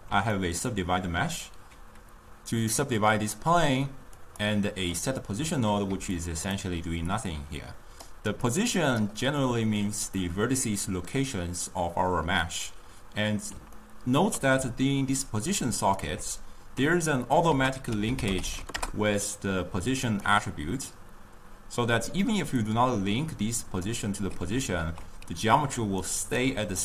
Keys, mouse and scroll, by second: 0.7-4.4 ctrl+middle drag, 4.4 click, 6.0 d, 6.3 drag, 6.6 d, 7.2-8.3 drag, 8.3 d, 8.3 d, 8.7 click, 9.0-9.5 d, 10.5-13.3 middle drag, 13.8-15.0 ctrl+middle drag, 15.0 d, 15.1 d, 15.3 click, 16.1 d, 17.6 ctrl+a, 22.8-25.8 drag, 26.2 ctrl+right click.